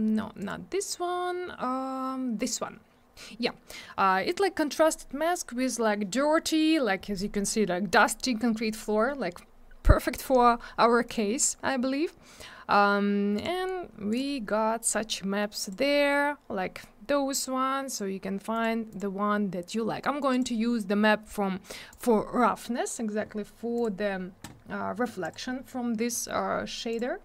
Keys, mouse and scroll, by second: 0.4 click, 11.1 click, 13.3 click, 14.1 click, 15.6 click, 17.9 click, 17.9 click, 18.5 click, 18.6 click, 18.9 click, 18.9 click, 20.3 click, 20.4 click, 21.9 click, 23.7 click, 25.2 click, 26.9 click.